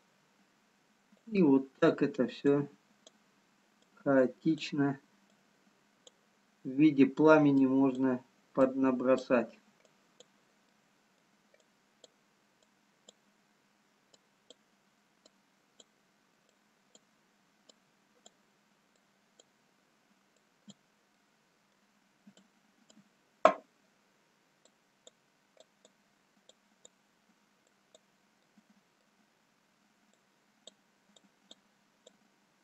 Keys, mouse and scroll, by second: 1.3 click, 2.5-10.9 click, 10.9 middle click, 11.8 click, 12.8 click, 21.1 click, 21.1 middle click, 22.3 click, 25.6 click, 28.3 click, 28.3 middle click, 30.3 click, 31.5 click.